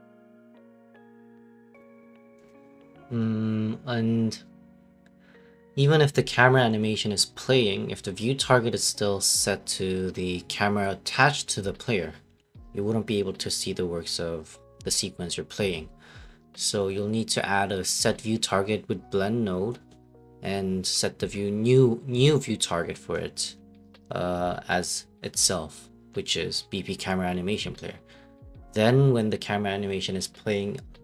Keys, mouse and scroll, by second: 0.1 ctrl+v, 1.3 click, 1.6 Delete, 1.8 right click, 2.0-3.7 typing, 4.5 ctrl+a, 4.9-7.5 typing, 8.0-8.5 scroll, 9.4-10.8 typing, 12.0-13.2 typing, 13.8 click, 16.2 click, 18.4 middle click, 18.5 middle click, 20.9 click, 21.1-22.2 typing, 23.1 click, 23.6 click, 24.4 click, 29.6 click, 30.0 click, 30.2 Delete.